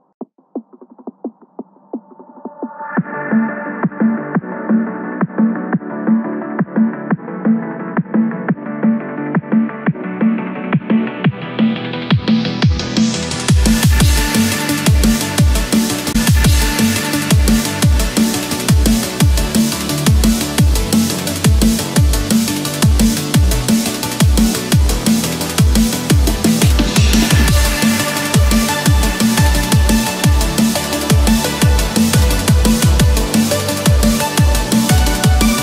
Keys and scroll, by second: 7.4 ctrl+-, 8.0 ctrl+=, 11.8 ctrl+-, 12.9 ctrl+z, 14.0 ctrl+=, 22.9 ctrl+-, 23.4 ctrl+=, 32.4 ctrl+-.